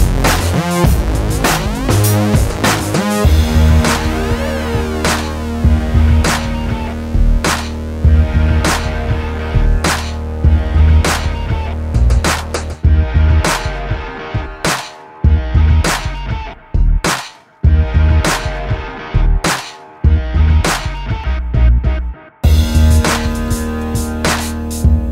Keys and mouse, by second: 0.8 click, 1.0 Tab, 1.5 click, 1.8 Tab, 2.5 alt+s, 3.0 click, 3.6 ctrl+2, 4.6 middle click, 5.2 ctrl+shift+b, 6.1 click, 6.8 click, 8.0 click, 8.6 ctrl+s, 9.7 i, 10.3 alt+s, 11.4 i, 12.0 alt+s, 13.2 ctrl+KP_Subtract, 13.4 alt+s, 14.7 middle click, 15.6 Tab, 17.0 Tab, 17.2 click, 17.9 a, 18.8 click, 19.1 click, 19.4 middle click, 19.6 click, 20.7-22.2 middle drag, 22.9 middle click, 23.2 middle click, 23.6 alt+s.